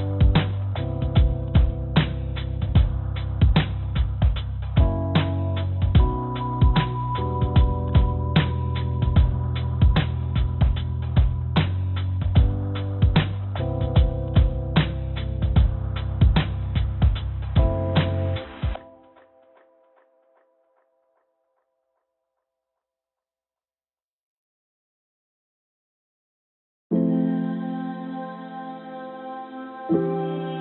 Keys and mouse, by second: 3.2 s, 4.8 g, 10.0 shift+d, 14.4 g, 18.6-20.6 drag, 21.8 click, 23.1 g, 26.2 click, 26.9 g, 29.5 g.